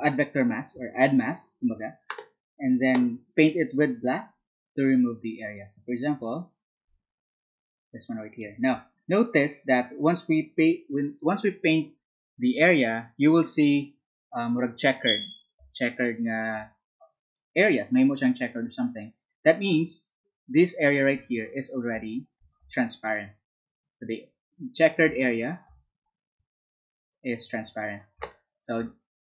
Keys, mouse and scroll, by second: 8.8-12.4 drag, 16.6 space, 17.5-21.7 drag, 24.6-26.2 drag, 27.2-29.2 drag.